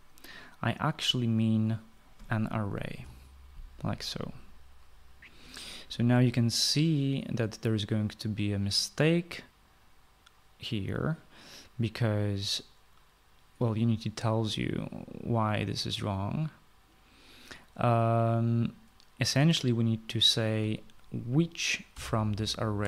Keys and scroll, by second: 3.7-4.2 typing, 22.7-22.8 typing.